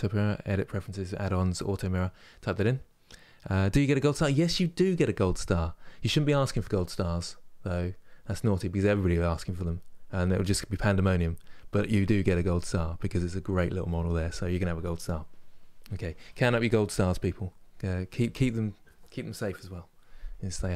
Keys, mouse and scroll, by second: 0.5-20.7 drag.